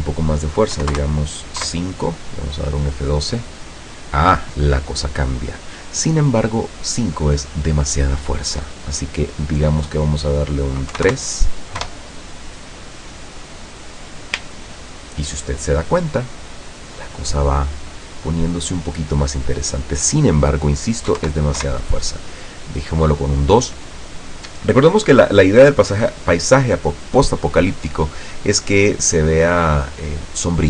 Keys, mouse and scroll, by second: 0.9 KP_5, 1.1 KP_Enter, 1.7 F12, 8.8 click, 11.0 KP_3, 11.2 KP_Enter, 11.9 F12, 20.1 click, 21.2 KP_2, 21.3 KP_Enter, 21.7 F12.